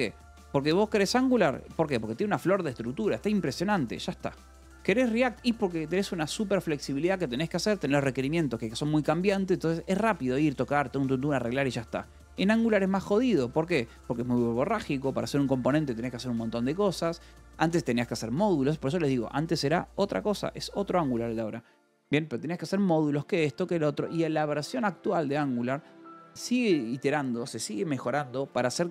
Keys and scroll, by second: 1.7 j, 2.3 j, 3.4 Escape, 4.3 k, 6.1 j, 6.8 Escape, 9.6 k, 10.1 j, 11.5 Escape, 11.8 j, 12.5 j, 13.0 k, 13.3 Escape.